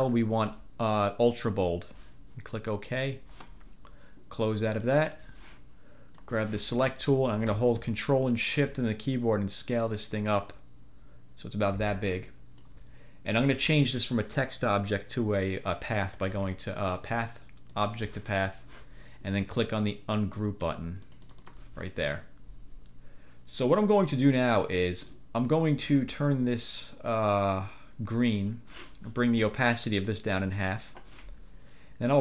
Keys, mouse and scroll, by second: 0.0 scroll down 2, 1.4 click, 2.8 click, 4.5 click, 6.3 click, 9.2-12.0 ctrl+shift+drag, 12.2-13.0 ctrl+shift+drag, 17.1 click, 17.9 click, 20.5 click, 21.1 click, 24.4 click, 28.5 click, 30.0-31.2 drag.